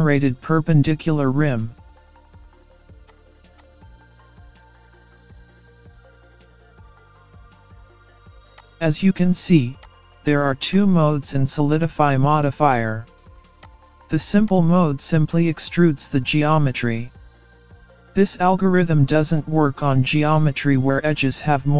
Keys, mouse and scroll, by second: 3.1 click, 3.6 click, 3.9 middle click, 6.2-6.5 scroll down 2, 6.4-7.0 scroll up 2, 14.9 click.